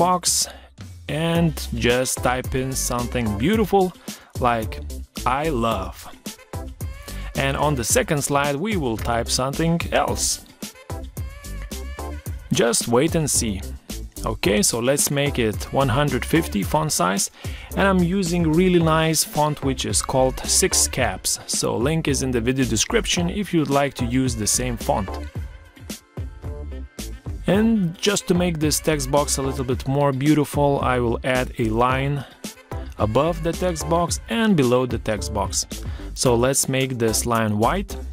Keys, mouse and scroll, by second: 3.1 Caps_Lock, 4.5 space.